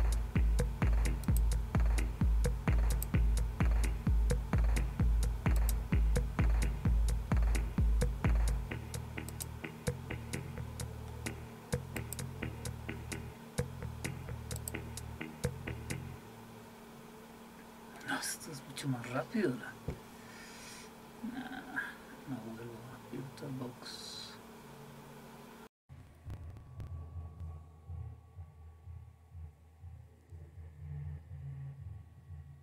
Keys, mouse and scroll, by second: 1.2 click, 2.9 click, 5.6 click, 9.3 click, 12.0 click, 14.6 click.